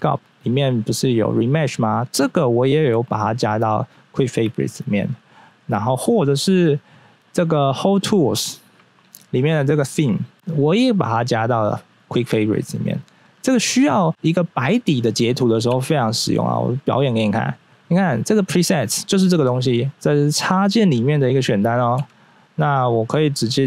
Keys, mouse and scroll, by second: 2.1 right click, 7.9-8.3 scroll down 1, 8.5 click, 10.3 right click, 13.4-14.1 scroll down 1, 14.1-15.0 scroll down 1, 15.7 q, 21.9 q.